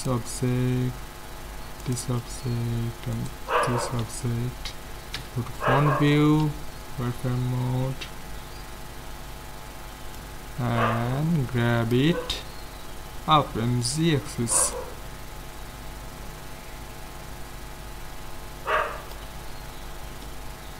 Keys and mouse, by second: 1.8-4.9 right drag, 4.1 z, 5.4 KP_1, 6.5 z, 10.2-12.0 drag, 14.8-16.4 drag, 19.4-20.7 middle drag, 19.9 z.